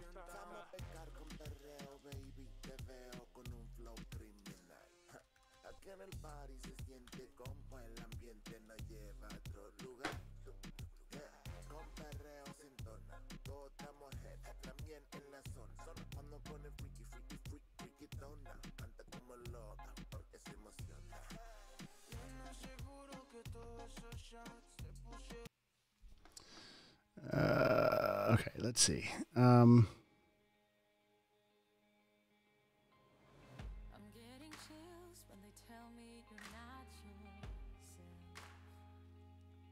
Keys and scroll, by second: 0.0-2.8 typing, 4.0-6.5 typing, 7.6 BackSpace, 8.5 Down, 9.2 Return, 14.4 super+w.